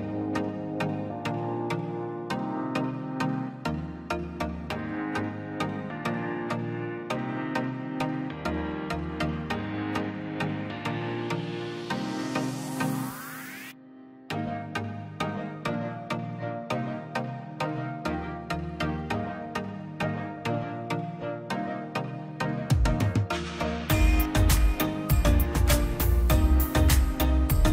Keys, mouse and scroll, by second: 0.2 click, 1.1 right click, 1.5 click, 4.8 scroll down 1, 5.9 click, 7.1-7.6 scroll down 1, 7.6 middle click, 7.9 scroll up 1, 8.5 click, 8.7-9.1 scroll down 1, 9.1 middle click, 10.4 middle click, 11.6 scroll down 1, 11.7 middle click, 12.5 click, 12.9 scroll up 1, 13.9 click, 14.1 scroll up 1, 14.3 middle click, 15.3 z, 16.0 middle click, 16.9 click, 17.1 scroll up 1, 17.2 click, 17.3 click, 18.4 ctrl+z, 18.8 click, 19.3 scroll up 1, 19.4 click, 19.8 scroll down 1, 20.1 middle click, 20.8 scroll up 1, 23.6 click, 24.1 ctrl+z, 24.6 click, 26.0-27.7 drag.